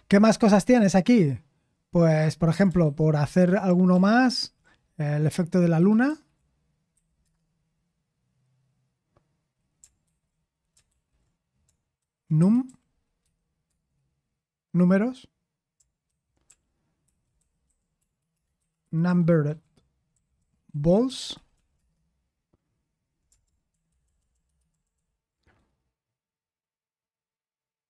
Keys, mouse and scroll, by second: 4.3 ctrl+w, 5.5-6.9 typing, 7.2 Return, 10.0 ctrl+c, 10.9 ctrl+p, 15.8-17.6 typing, 17.4 ctrl+p, 18.5 ctrl+p, 18.8 c, 20.6-22.2 typing, 23.7-24.0 typing, 24.0 ctrl+*, 24.2 ctrl+*.